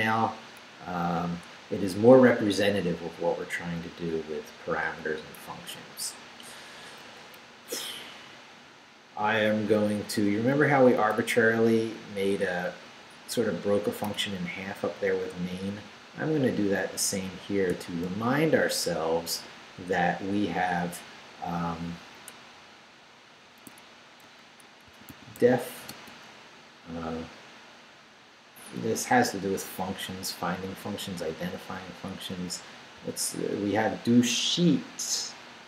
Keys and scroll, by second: 0.6 Up, 6.4 Up, 7.4 Down, 10.3 Up, 11.0 Down, 14.2 Up, 17.7 i, 18.1 Return, 23.6 Tab, 24.2-25.9 typing, 33.0 d.